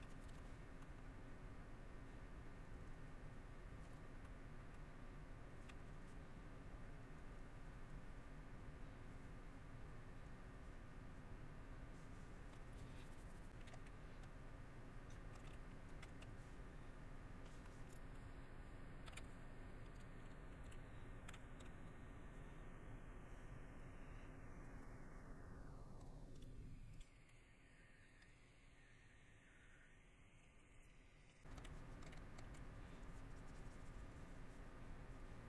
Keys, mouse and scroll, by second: 0.4 shift+middle click, 1.0 middle click, 3.4 middle click, 4.2 shift+middle click, 4.7 shift+middle click, 9.0 middle click, 9.5 middle click, 10.7 middle click, 12.0 middle click, 12.6 middle click, 13.5 shift+middle click, 17.6 shift+middle click, 18.1 shift+middle click, 18.6 middle click, 22.4 middle click, 24.8 shift+middle click, 25.5 middle click, 27.3 shift+middle click, 29.7 middle click, 31.4 middle click, 32.7 middle click, 34.3 middle click, 34.8 middle click.